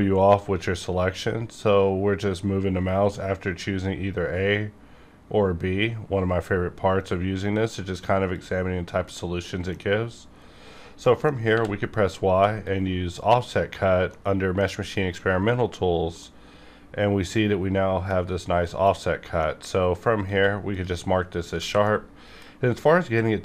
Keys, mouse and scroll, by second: 4.2 scroll up 1, 8.3 click, 8.5 scroll down 1, 9.0 middle click, 9.1 middle click, 9.8 scroll up 1, 11.0 middle click, 11.4 y, 12.6 click, 13.6 scroll down 1, 14.1 middle click, 15.2 scroll up 1, 16.1 middle click, 16.2-18.2 middle drag, 18.2 scroll up 1, 18.6 middle click, 18.7 middle click, 18.9 scroll up 1, 19.3 middle click, 19.7 scroll up 1, 20.2 q, 20.6 click, 21.0 scroll down 1, 21.6 alt+a, 21.8-23.4 middle drag.